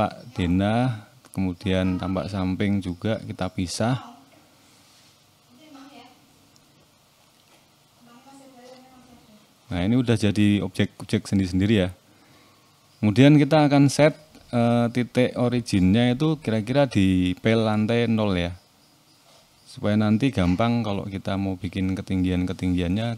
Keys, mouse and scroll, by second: 0.0-0.7 scroll up 1, 1.2 click, 2.5 p, 4.2 click, 6.2 p, 8.3 Tab, 8.6 click, 9.3 click, 9.7 shift+middle click, 10.2-12.1 scroll up 9, 10.9 shift+middle click, 12.1 Tab, 12.7 click, 13.6-14.4 scroll up 2, 14.4 1, 14.8 click, 16.7 shift+s, 18.5 Tab, 19.0-19.5 scroll down 4, 19.5 right click, 22.8 click.